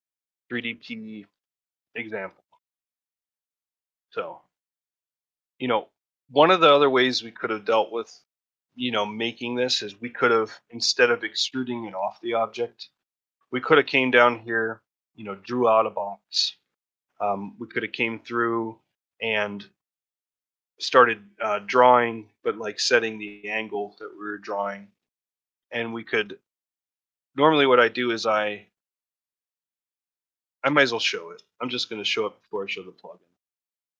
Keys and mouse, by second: 5.7 middle drag, 6.0 shift+middle drag, 6.3-6.8 alt+middle drag, 7.5 middle drag, 9.6-10.1 middle drag, 10.2-10.7 shift+middle drag, 11.7-12.2 shift+middle drag, 12.8 middle drag, 13.3-13.7 middle drag, 13.9-14.2 shift+middle drag, 24.9 shift+middle drag, 25.5 ctrl+middle drag, 25.8 shift+middle click, 28.4-28.7 shift+middle drag, 29.1-29.4 shift+middle drag, 29.8-30.2 shift+middle drag, 30.3 ctrl+middle drag, 30.6 shift+middle drag, 31.0 ctrl+middle drag, 31.4 shift+middle drag, 31.8 middle drag, 33.1 click.